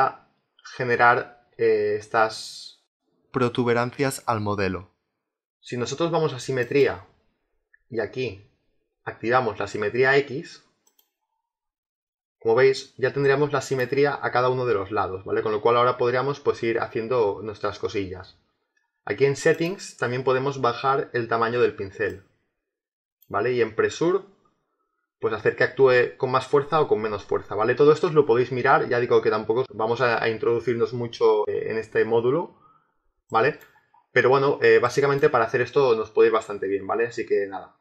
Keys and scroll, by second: 4.7 ctrl+z.